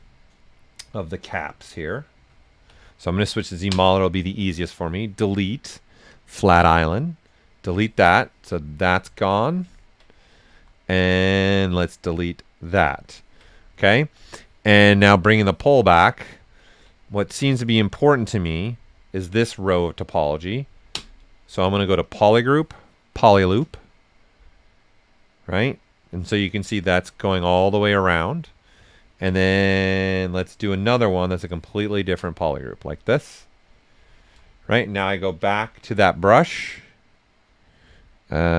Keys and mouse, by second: 1.2 b, 2.2-3.7 typing, 7.5 click, 8.2 ctrl+right click, 10.0 right click, 10.8 right click, 10.8 typing, 12.6 click, 13.0 ctrl+right click, 13.7 right click, 15.1 click, 15.8 right click, 17.2 s, 17.3-19.8 drag, 19.8 ctrl+right click, 20.9 space, 22.0 click, 22.7 typing, 23.1 click, 24.6-26.6 drag, 26.6 ctrl+right click, 27.2-28.9 right drag, 29.3 right click, 30.2-31.7 drag, 31.7 ctrl+right click, 32.6 right click, 33.3 right click, 35.3 b, 37.8 typing.